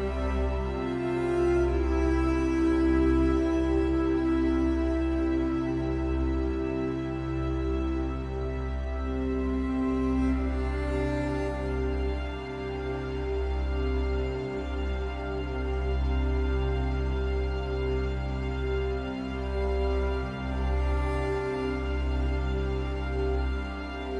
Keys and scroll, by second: 17.1 ctrl+z.